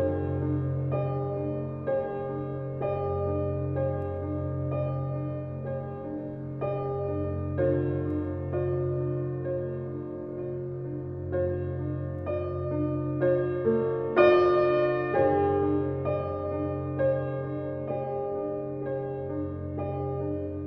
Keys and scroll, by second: 7.3 ctrl+v, 11.1 1.